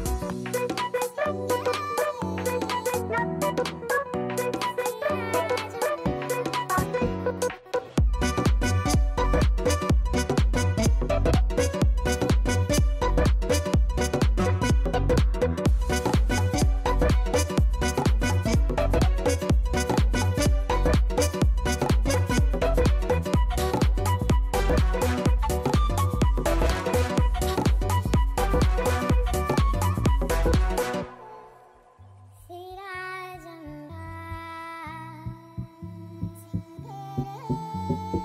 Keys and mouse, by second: 0.2 click, 4.2 click, 4.7 click, 5.7 click, 8.0 click, 8.3 click, 8.7 click, 9.2 click, 10.2 click, 12.2 click, 14.4 click, 14.8 click, 15.0 click, 15.5 click, 15.8 click, 22.0 KP_4, 25.6 click, 28.0 click, 35.9 click, 37.9 click, 38.1 click.